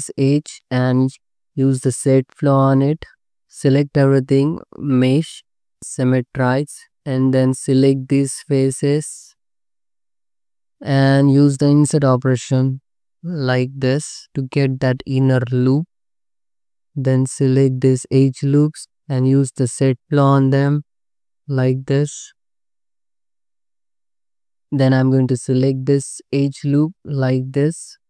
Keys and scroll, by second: 3.7 a, 7.3 3, 7.9 3, 9.0 3, 10.6 i, 12.6 b, 16.8 2, 17.3 alt+z, 22.8 ctrl+z, 24.1 alt+z.